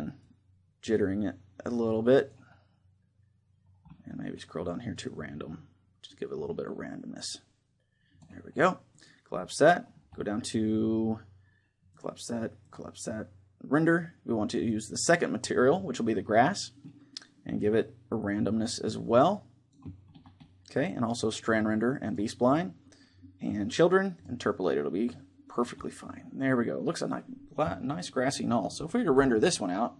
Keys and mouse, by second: 4.8-6.4 drag, 8.6-10.5 drag, 11.6-14.1 drag, 14.4-16.1 drag, 17.3-19.0 drag, 21.1-23.4 drag, 23.6-25.7 drag, 24.8-28.9 middle drag, 28.9 KP_0.